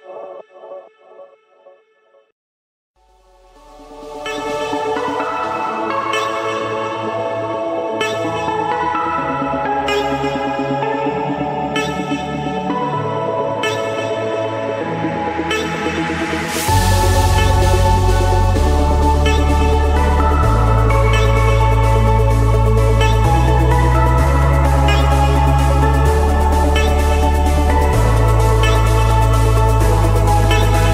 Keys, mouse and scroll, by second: 0.8 click, 1.5 Escape, 3.1-4.2 drag, 5.2-6.4 drag, 6.6-7.7 drag, 7.0 Escape, 8.1-9.3 drag, 10.5-12.8 typing, 11.9 Return, 13.4 Escape, 14.8-15.3 scroll up 2, 15.3-16.4 scroll up 3, 16.9 click, 18.3 click, 18.7-19.3 scroll down 4, 19.3-19.6 scroll up 5, 19.6-20.4 scroll, 20.4 click, 21.0-21.4 scroll, 21.6 Escape, 22.1 click, 22.4 click, 24.2-24.8 typing, 25.6 Return, 26.6 Return, 28.6-29.7 drag, 30.4-30.9 drag.